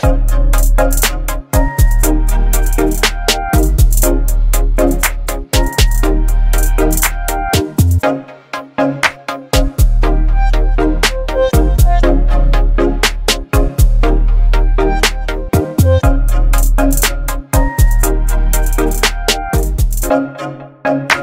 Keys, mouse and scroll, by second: 8.7-13.7 drag, 15.3-16.9 drag.